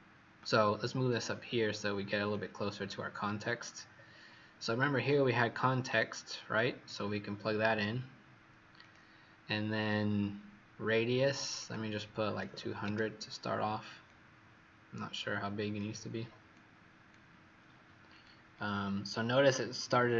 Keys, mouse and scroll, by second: 0.3 click, 1.4 scroll up 7, 2.2 click, 3.2-3.9 scroll down 1, 3.9 scroll up 3, 5.2-6.2 scroll down 2, 6.2-6.8 scroll up 1, 6.8 click, 8.7 click, 11.5 click, 12.3 KP_2, 12.4 KP_0, 12.6 KP_0, 14.0 click, 18.5-20.1 scroll down 2.